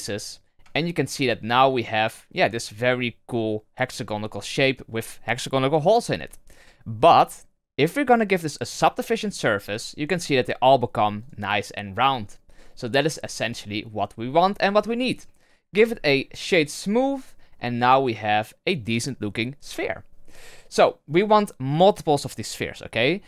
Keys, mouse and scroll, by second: 0.3 scroll down 1, 0.5 Tab, 0.8-4.3 middle drag, 4.3-4.7 scroll up 2, 6.9 click, 8.9-9.5 drag, 9.5-10.2 scroll down 2, 11.1-12.1 drag, 12.1-13.1 middle drag, 13.1-15.3 scroll up 3, 15.3 scroll down 1, 15.7 w, 17.2 scroll down 2, 17.5-19.6 middle drag, 19.6 KP_1.